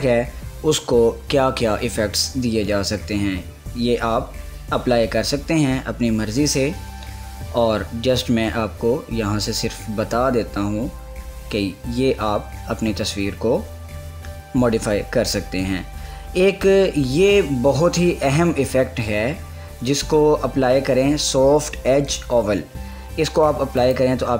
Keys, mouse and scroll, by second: 24.0 click, 24.2 click.